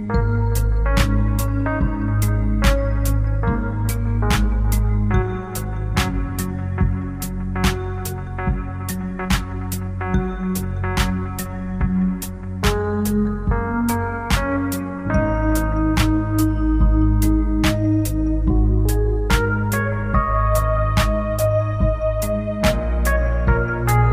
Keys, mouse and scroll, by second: 2.7 click, 4.8 click, 7.3 p, 8.3 p, 12.1 click, 13.7 click, 14.3 click, 21.4 p, 22.8 click.